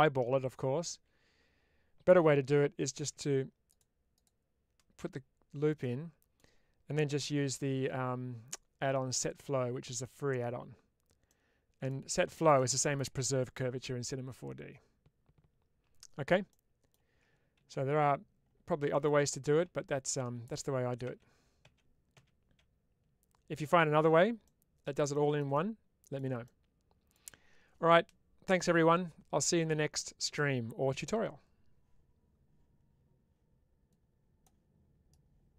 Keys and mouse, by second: 0.9 ctrl+z, 4.0 click, 5.7 middle click, 7.1 q, 11.2 middle click, 12.4 middle click, 16.5 middle click, 18.8 middle click, 24.3 middle click, 25.5-27.0 middle drag.